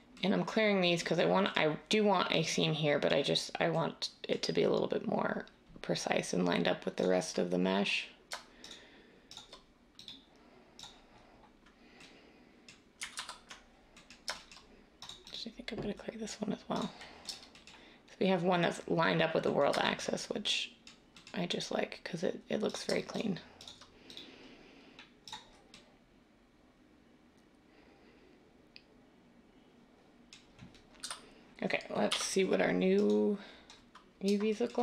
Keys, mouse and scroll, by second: 13.1 ctrl+z, 31.0 a, 32.0 u.